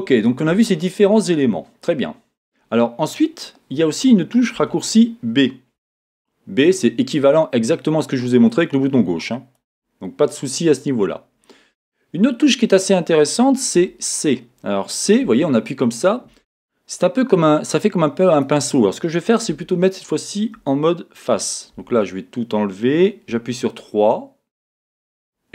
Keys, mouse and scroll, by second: 5.8 b, 13.7 a, 15.3 c, 20.6 Escape, 21.7 a, 23.3 3.